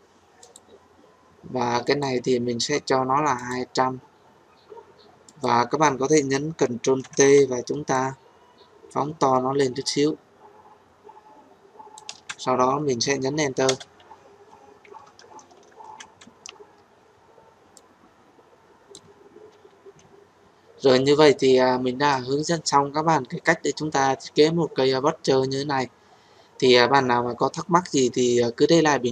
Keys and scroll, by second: 6.9 ctrl+t, 13.6 Return.